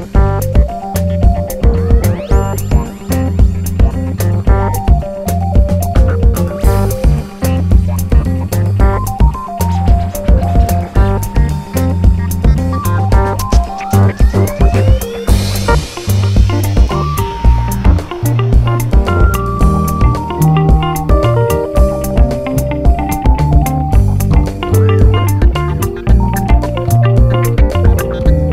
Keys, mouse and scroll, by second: 0.0 g, 1.4 r, 2.2 g, 4.0 click, 4.3 KP_7, 5.1 click, 5.3 r, 5.7 right click, 5.9 click, 6.1 g, 6.9 click, 8.1 r, 9.5 g, 9.5 click, 10.1 g, 10.6 s, 11.0 click, 12.6 ctrl+right click, 13.1 g, 16.1 KP_1, 16.9 g, 19.9 click, 20.4 g, 21.8 r, 22.3 g, 22.8 click, 23.5 g, 24.8 click, 25.3 shift+click, 25.7 right click, 25.9 click, 26.5 KP_7, 27.1 r, 28.1 click.